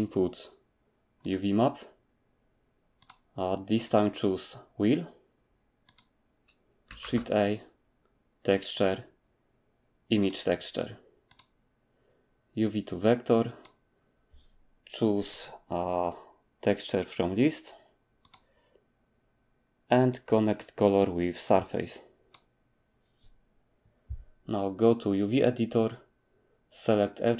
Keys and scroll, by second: 7.0 a.